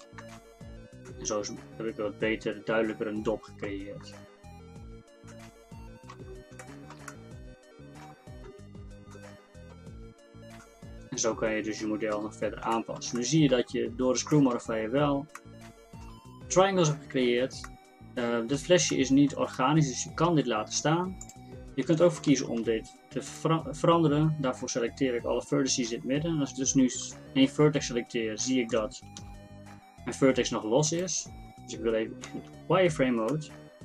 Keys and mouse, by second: 0.3 Tab, 4.1 Tab, 4.6 Tab, 8.5 Tab, 21.3-22.3 middle drag, 22.3 ctrl+Tab, 27.0-29.2 middle drag, 29.2 g, 32.3 z.